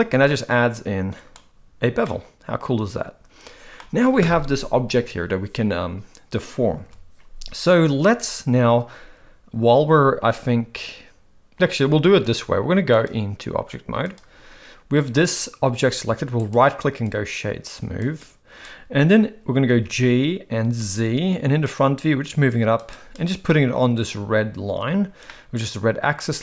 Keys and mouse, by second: 0.3-1.3 middle drag, 2.0-3.7 middle drag, 6.8 KP_1, 13.1-14.2 drag, 16.6-18.2 right drag, 19.7 g, 25.3-26.4 middle drag.